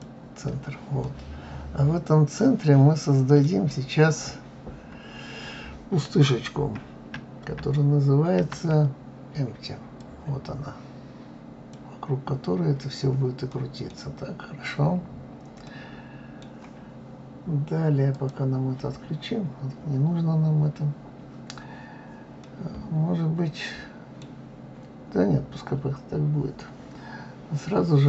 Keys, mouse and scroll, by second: 1.0-3.9 middle drag, 3.9 scroll down 2, 4.7-5.2 scroll up 5, 8.3 shift+a, 13.5 middle click, 14.0-14.9 scroll down 2, 14.9-15.5 scroll up 4, 15.6-18.1 middle drag, 18.1 click, 19.0 scroll down 1, 21.3-22.4 scroll up 1, 22.4-25.4 middle drag.